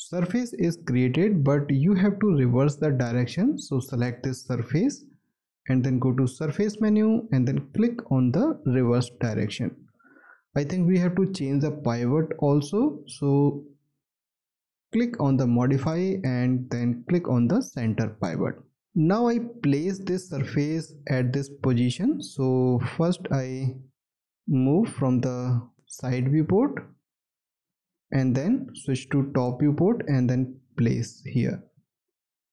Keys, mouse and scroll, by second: 19.6 alt+middle click, 21.2 scroll down 1, 22.0 alt+middle click, 28.2 space, 29.9-30.4 scroll up 1, 30.6 alt+middle click, 31.1 alt+scroll up 1.